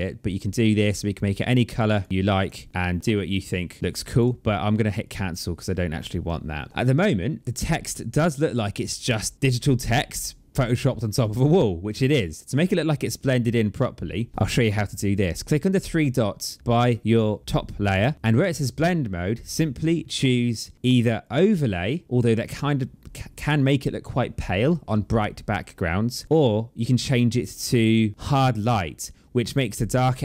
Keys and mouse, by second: 0.3 click, 1.4 click, 3.0 click, 4.5 click, 17.7 click, 19.2 click, 21.1 click, 26.1 click, 28.1 click.